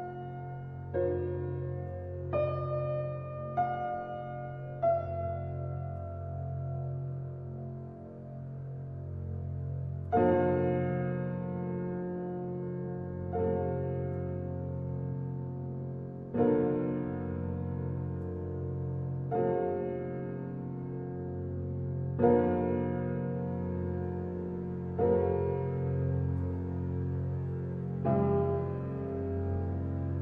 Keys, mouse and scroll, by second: 0.8 alt+click, 2.3 f, 3.4 scroll up 1, 3.4 middle click, 4.2-4.6 scroll down 1, 4.6-5.7 middle drag, 5.7 i, 13.1-15.9 right drag, 15.9 s, 22.5 KP_7, 23.4 KP_1, 24.5 KP_7, 24.8 KP_9, 25.4-26.5 scroll up 2, 26.5 r, 30.1-30.2 scroll down 2.